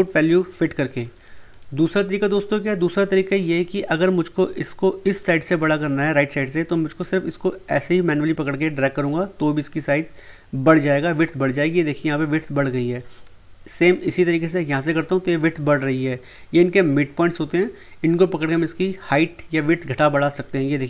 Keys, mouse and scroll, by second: 1.1 click, 6.9-10.1 drag, 13.9-16.8 drag, 20.4 click.